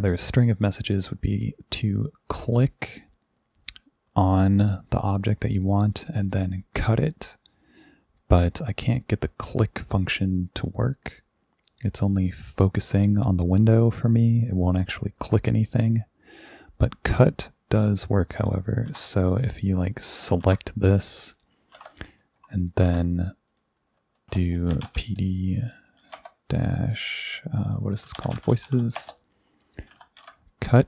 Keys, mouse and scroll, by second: 18.4 click, 18.9 ctrl+e, 20.0 click, 20.6 click, 21.4 drag, 21.8 ctrl+2, 21.9 click, 22.8 click, 23.0 click, 23.5 click, 24.5-26.2 typing, 27.8-30.7 typing.